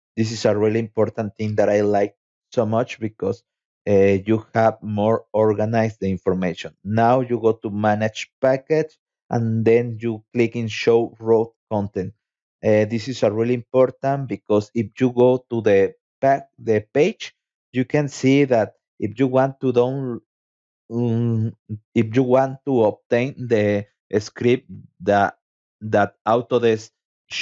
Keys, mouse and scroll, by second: 2.5 click, 3.6 click, 5.0 click, 9.1 click, 12.7 click, 13.6 Tab, 14.1 Tab, 14.5 Tab, 15.2 Tab, 15.6 Tab, 17.1-18.9 scroll down 6, 20.7 click, 23.2-27.2 drag.